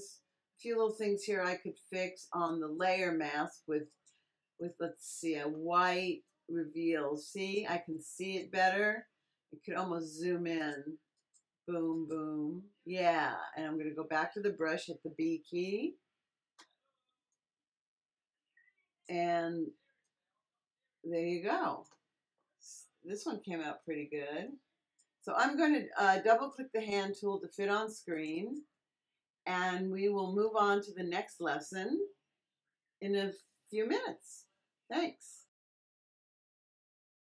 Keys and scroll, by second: 15.0 b.